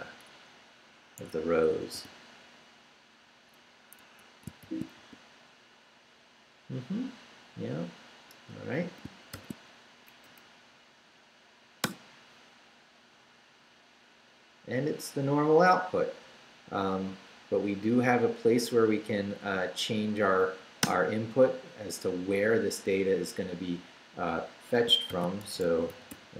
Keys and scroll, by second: 0.5 Down, 1.2 Escape, 1.7 d, 4.0 Escape, 4.6 shift+;, 5.0 shift+w, 5.9 w, 8.3 Return, 9.0 shift+Return, 9.3 shift+;, 9.9 shift+Up, 11.8 Return, 20.9 Return, 24.9-26.3 typing.